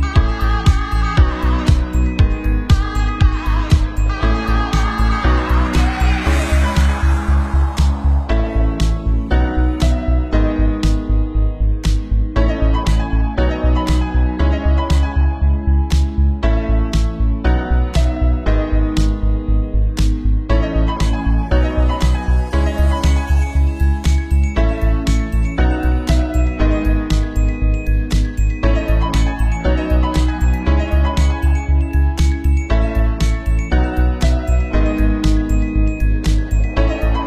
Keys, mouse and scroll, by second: 0.4 ctrl+j, 3.2 middle click, 3.3 shift+middle click, 3.5 shift+z, 3.5 middle click, 3.5 shift+z, 4.4 shift+middle click, 4.6 middle click, 5.6 shift+z, 6.6 shift+z, 6.7 shift+z, 9.1 ctrl+z, 10.2 shift+z, 10.4 shift+z, 10.8 click, 13.3 shift+d, 14.9 ctrl+a, 15.4 middle click, 15.4 shift+d, 15.9 ctrl+a, 17.0 shift+d, 17.0-18.1 middle drag, 18.2-19.7 middle drag, 21.0 shift+d, 21.9 shift+z, 22.0 shift+middle click, 22.2 shift+z, 23.2 middle click, 23.8 Tab, 23.9 KP_3, 24.3 KP_2, 37.0 KP_3, 37.1 KP_3.